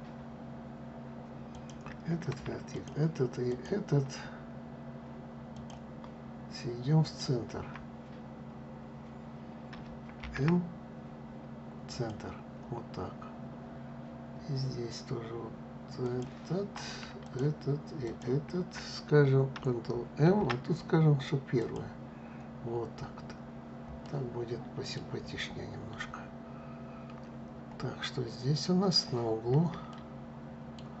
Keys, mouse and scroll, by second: 1.2 click, 2.4 shift+click, 3.2 shift+click, 5.2 shift+click, 6.7 shift+click, 9.9 alt+m, 12.8-14.2 scroll down 1, 15.7 click, 16.9 shift+click, 17.7 shift+click, 19.9 alt+m, 22.3-23.7 scroll down 2, 23.7-24.9 middle drag, 24.9-25.7 scroll down 2, 26.4-27.2 scroll up 1, 27.2-27.7 scroll up 1, 27.8-28.6 scroll up 3, 28.8-29.2 scroll up 2, 29.6-31.0 shift+middle drag.